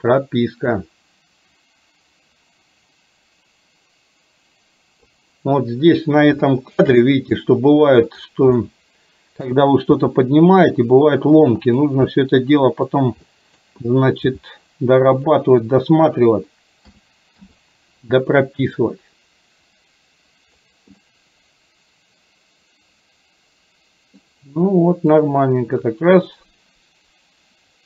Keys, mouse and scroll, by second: 0.8-5.2 drag, 6.6 shift+middle drag, 7.1-7.4 middle drag, 8.1 click, 8.7-9.6 middle drag, 10.1 r, 12.2 middle click, 13.4 middle click, 14.4 g, 16.9 a, 17.6 i, 18.9-20.7 drag, 21.1-24.3 middle drag, 25.2-27.8 drag.